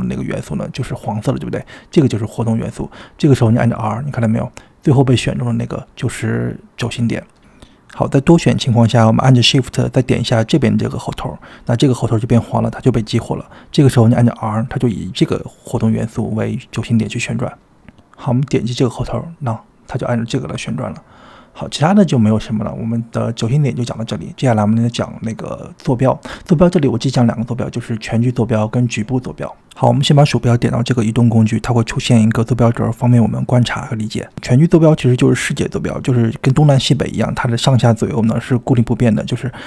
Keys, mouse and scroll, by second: 0.3 shift+click, 3.6 r, 9.1 shift+click, 15.4 r, 17.4 shift+click, 18.5 r, 20.4-21.3 drag, 22.1-23.2 middle drag, 24.9-27.1 middle drag, 27.2 middle click, 27.9 click, 29.0-30.4 drag, 31.6-32.1 middle drag, 32.6 click, 34.1 drag, 36.2 g.